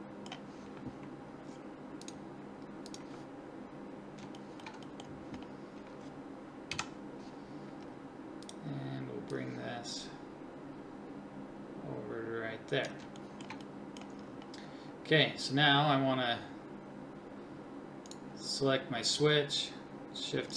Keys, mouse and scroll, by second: 2.3 click, 3.0-6.7 drag, 6.7-8.4 middle drag, 6.7 KP_1, 10.8 click, 13.2-18.1 drag.